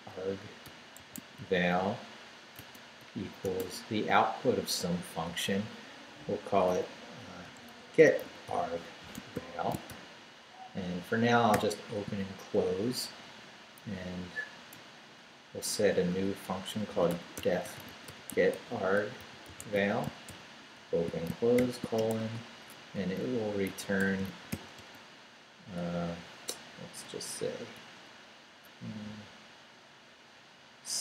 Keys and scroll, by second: 0.0-3.4 typing, 7.2-9.9 typing, 11.5 shift+0, 12.7 shift+Down, 14.7 Return, 15.8 Up, 16.6-21.6 typing, 22.0 shift+Return, 22.2 Tab, 23.3-25.0 typing, 27.8 shift+'.